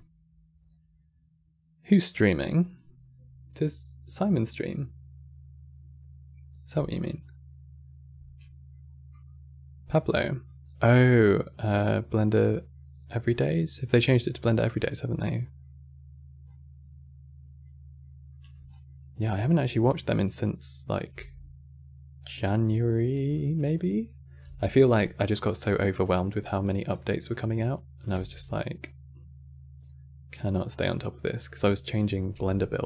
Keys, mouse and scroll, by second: 8.1 middle click, 8.5-10.1 scroll up 3, 10.1-11.8 drag, 12.4-13.5 middle drag, 13.5 click, 14.9-16.2 middle drag, 16.2 click, 17.7 middle click, 18.4 scroll down 2, 18.6-19.8 middle drag, 19.8 click, 20.8 g, 24.1 g, 25.2-27.7 middle drag, 27.7 click, 27.8 g, 31.3 click, 32.0 g.